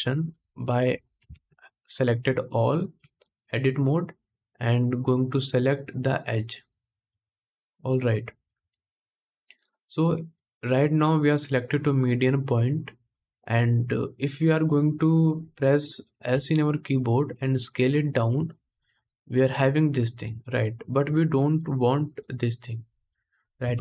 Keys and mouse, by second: 1.0 ctrl+Tab, 1.9-20.2 drag, 2.7 Tab, 16.0 s, 20.2 middle click, 23.3 KP_1.